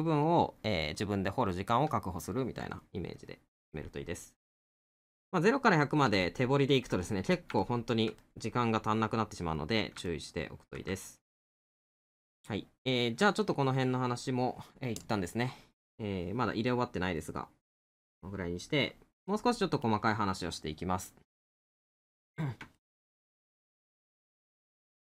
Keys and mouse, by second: 2.8 middle click, 5.1 middle click, 10.1 middle click, 12.3 middle click, 17.2 middle click, 19.3 middle click, 22.0 middle click.